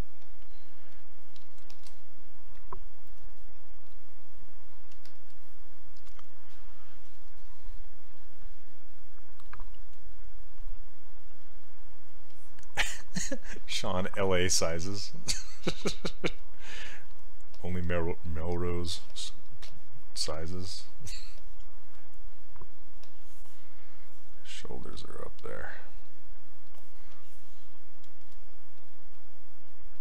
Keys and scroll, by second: 19.1 s.